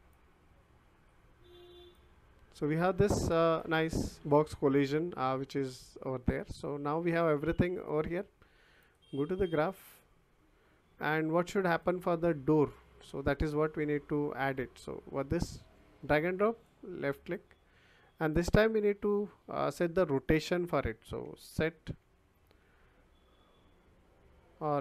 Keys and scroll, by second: 21.2 s.